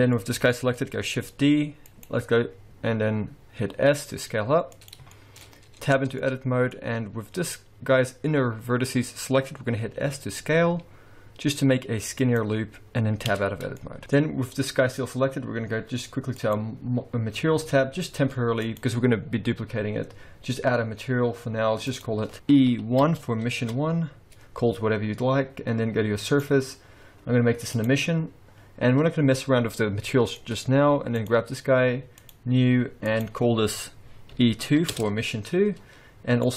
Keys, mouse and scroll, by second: 0.2 middle click, 1.3 shift+d, 3.9 s, 4.9 click, 5.1-5.4 shift+scroll up 1, 5.4 shift+middle click, 6.0 Tab, 6.1 middle click, 6.8-8.0 scroll up 1, 10.0 s, 13.3 Tab, 13.5-14.0 scroll down 4, 13.8 middle click, 14.0 middle click, 14.0-14.6 scroll up 1, 16.3 click, 18.6 click, 21.9 click, 26.3 click, 30.1 middle click, 30.5-31.2 scroll up 1, 31.2 click, 32.2 click, 33.0 click, 36.4 click.